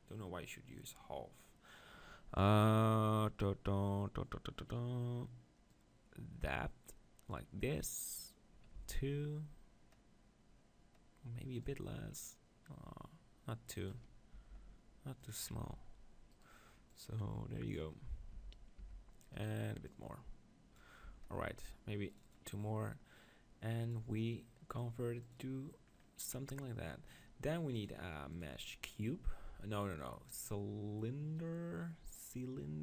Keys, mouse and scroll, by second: 8.8 z, 11.8-13.4 drag, 14.3 g, 15.3-18.8 drag, 15.7 Tab, 16.3-18.3 right drag, 18.3 Tab, 18.8 Tab, 19.3-21.1 drag, 19.8-23.8 right drag, 21.1 Tab, 25.3 click, 25.9-28.2 middle drag, 28.2-29.6 drag.